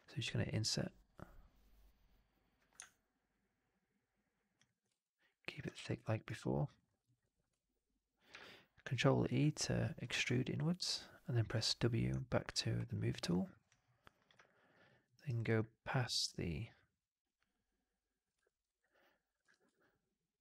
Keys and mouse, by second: 4.8 alt+click, 5.2 alt+right click, 5.4 alt+click, 5.9 alt+click, 6.1 alt+right click, 6.4 alt+right click, 6.5 alt+click, 6.7 alt+middle click, 6.8 alt+right click, 6.9 alt+right click, 7.1 click, 8.2 ctrl+e, 10.0 w, 10.2-11.3 alt+drag, 12.1 alt+click, 12.5 alt+middle click, 12.7 alt+right click, 14.3 alt+click, 14.7 alt+middle click, 15.0 alt+right click, 15.2 alt+click, 17.1-18.2 drag, 18.3 alt+middle click, 18.5 alt+right click, 18.7 alt+click, 19.4 shift+x, 19.6-20.4 alt+drag.